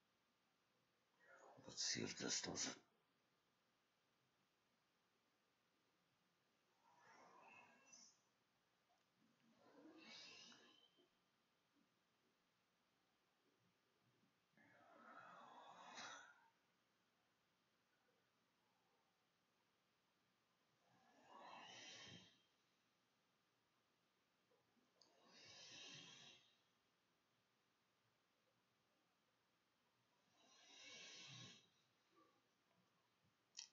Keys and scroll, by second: 0.2 ctrl+shift+s, 2.2 e.